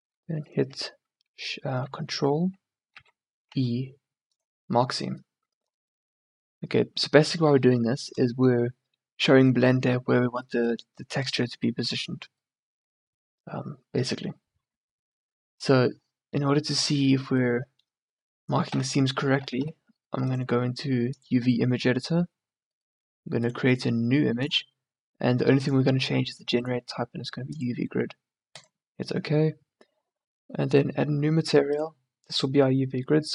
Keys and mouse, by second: 3.1 ctrl+e, 18.7 t, 19.4 t, 19.6 n, 22.3 middle click, 31.8 click.